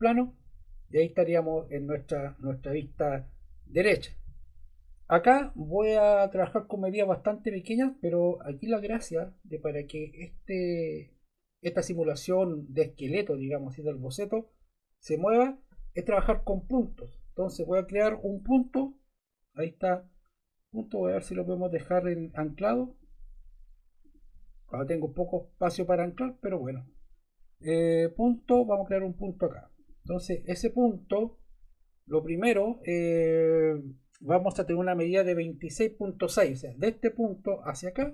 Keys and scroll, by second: 32.2 Escape.